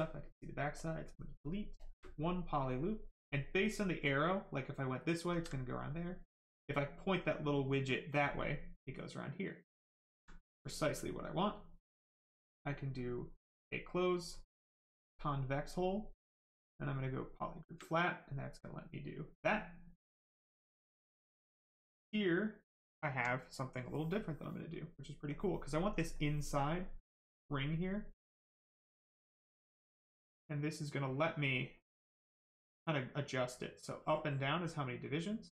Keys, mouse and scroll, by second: 0.8 click, 0.8 space, 4.6 click, 5.3 ctrl+z, 7.7 click, 8.3 right click, 10.0 alt+right click, 10.3 right click, 10.4 right click, 11.5 space, 13.6 space, 14.5 click, 14.6 space, 16.7 space, 17.1 click, 17.2 space, 18.6 click, 19.4 right click, 21.2 alt+right click, 27.4 click.